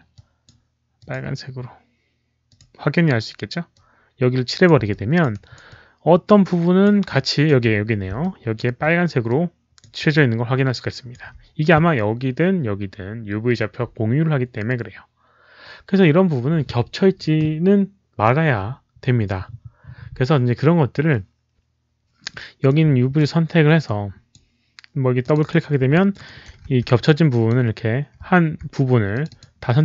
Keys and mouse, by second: 0.0-0.4 alt+drag, 0.9 alt+click, 2.4 click, 3.6 click, 4.8 alt+click, 5.2 alt+right click, 5.6-6.7 alt+drag, 7.0 alt+click, 7.4 alt+right click, 8.1 alt+click, 8.4 alt+right click, 9.2 alt+click, 10.0-11.0 alt+drag, 11.1 alt+right click, 14.4 alt+click, 14.4 alt+right click, 16.4 alt+click, 17.8 alt+click, 22.6-23.1 right drag, 23.7 click, 25.1 click, 25.3 click, 25.9 alt+middle click, 26.1 alt+right click, 26.6 w, 27.0 click, 29.0 click, 29.2 click.